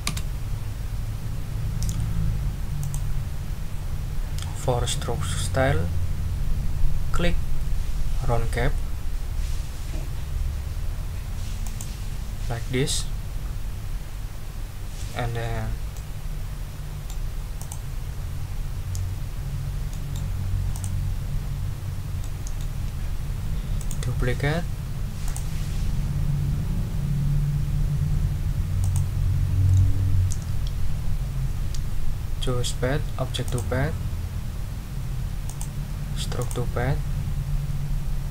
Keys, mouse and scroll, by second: 0.0 Return, 2.8 click, 11.6 click, 15.9-17.2 middle drag, 17.6 click, 19.9 middle click, 20.7 click, 22.2 middle click, 23.8 right click, 25.2 click, 28.8 click, 33.4 click, 35.5 click, 36.4 click.